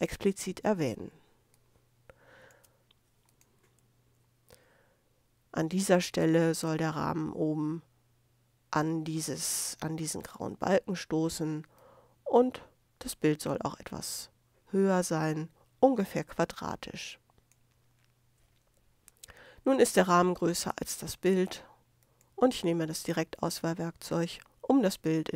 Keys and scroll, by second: 1.0 super+space.